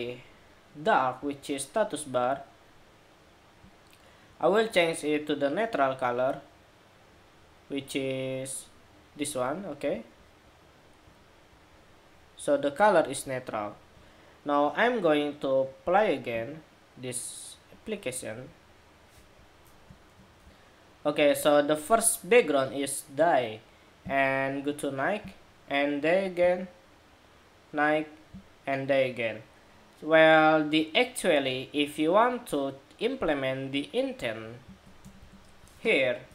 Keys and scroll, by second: 20.1 shift+super+2.